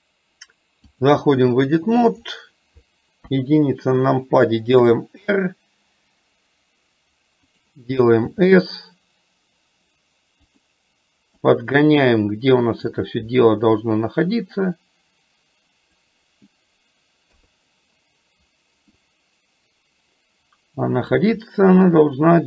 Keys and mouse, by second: 1.6 middle click, 3.4 KP_1, 4.9 r, 11.5-13.0 drag, 14.5-16.1 drag, 17.4 KP_3, 19.0-21.2 drag.